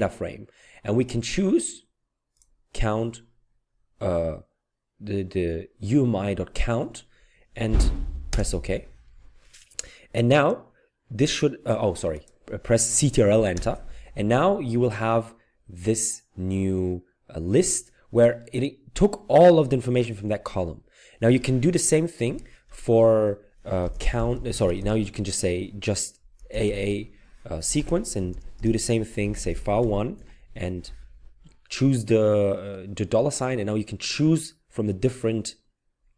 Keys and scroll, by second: 8.3 Return, 13.6 ctrl+Return, 23.6-24.7 typing, 26.4-27.1 typing, 28.2-30.3 typing.